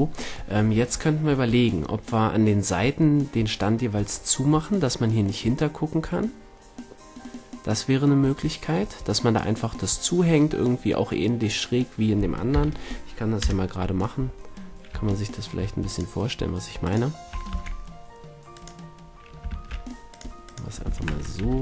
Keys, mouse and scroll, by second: 4.2-9.1 middle drag, 12.4 KP_1, 13.3 KP_Enter, 13.3 KP_3, 15.8 click, 16.6-19.3 drag, 17.4 shift+c, 19.4 shift+a, 20.8 r.